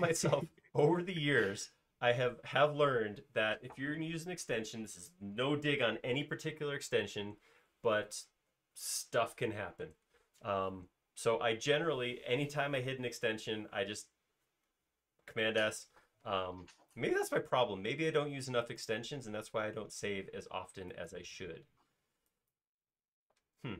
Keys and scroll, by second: 17.1 l.